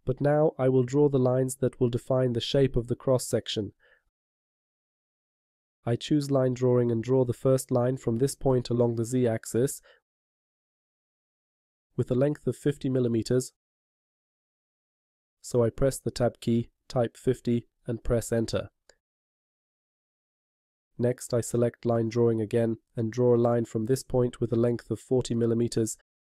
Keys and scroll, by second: 16.6 Tab.